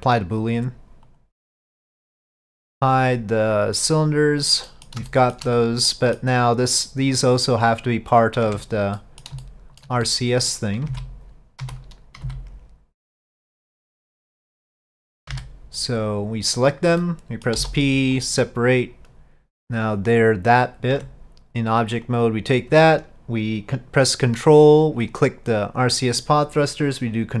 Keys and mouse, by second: 1.1 click, 2.2 middle click, 4.2 click, 4.7 middle click, 5.2 shift+middle click, 6.0 middle click, 6.6 click, 7.4 click, 8.5 Tab, 9.1 middle click, 9.5 shift+middle click, 10.1 middle click, 11.0 alt+a, 11.7 3, 14.8 middle click, 17.1 middle click, 17.1 c, 20.0 click, 21.0 Tab, 22.2-22.8 drag, 25.2-27.4 ctrl+drag.